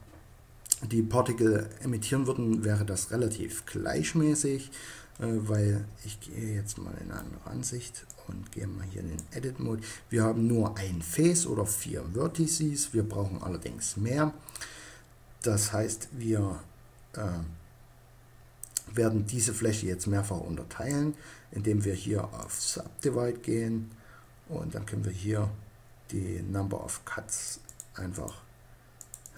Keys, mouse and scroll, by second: 4.6-7.0 drag, 8.7 click, 15.4-17.2 drag, 21.9-23.6 drag, 24.1-26.8 middle drag, 26.8-29.3 drag.